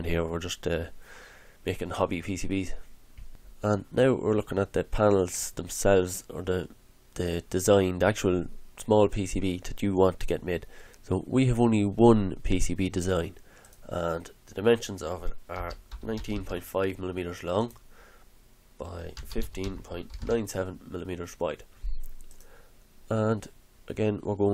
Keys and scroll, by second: 15.3-16.8 typing, 18.9-20.7 typing.